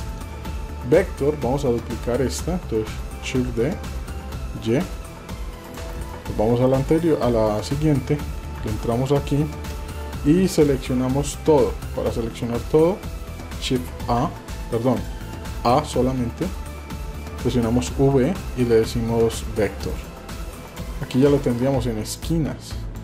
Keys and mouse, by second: 1.1 shift+click, 1.8 Tab, 3.4 shift+d, 6.2-6.7 shift+drag, 8.6 Tab, 14.2 shift+a, 14.9 click, 15.5 a, 17.8 v, 20.6 click, 22.1 click.